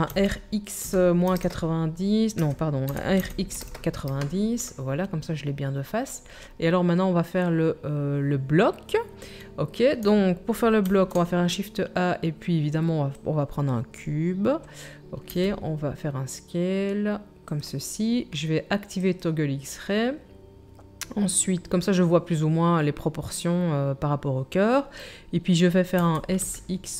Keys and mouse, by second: 2.9 r, 10.8 shift+a, 15.3 s, 17.6-19.0 drag, 26.0-26.9 middle drag, 26.0 s.